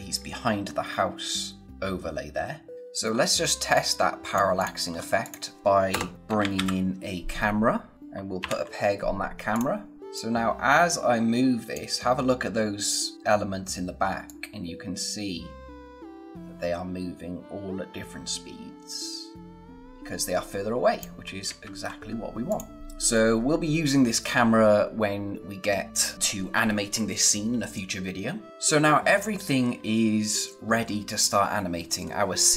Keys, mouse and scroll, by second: 2.7 scroll down 1, 3.7 click, 4.9-5.2 scroll up 1, 5.2 click, 5.9 Return, 6.0-7.0 typing, 7.9 click, 8.4 ctrl+p, 9.5 click, 10.0 scroll up 1, 10.1 click, 14.2 click, 21.4 ctrl+z, 22.2 scroll down 1, 22.4 click, 22.8-24.6 scroll up 1, 28.5 click, 31.9 scroll down 1.